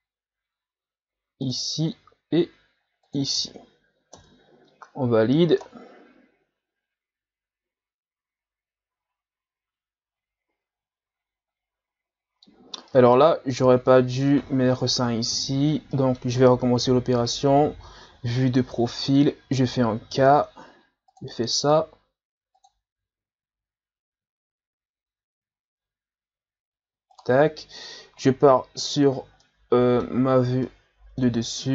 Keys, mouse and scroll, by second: 5.3-5.6 scroll up 1, 5.6-8.6 middle drag, 12.9 middle click, 13.6 ctrl+z, 14.2-17.6 middle drag, 17.6 KP_3, 18.2-20.1 scroll up 3, 20.1 k, 29.4 middle click, 30.3-30.7 scroll down 4, 30.7-31.7 middle drag.